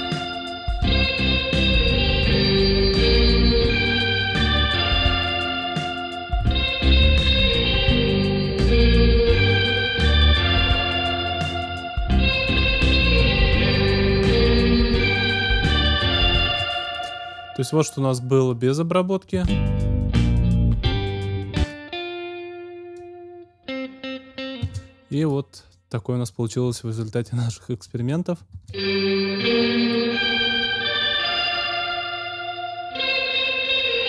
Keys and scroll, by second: 16.4 space, 19.3 space, 24.5 space, 28.5 space.